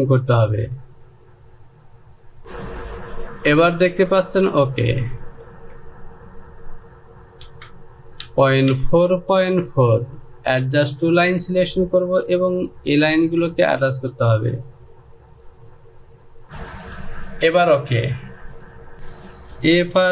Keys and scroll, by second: 2.4 j, 8.7 Down, 9.2 Down, 16.4 ctrl+z, 18.9 e.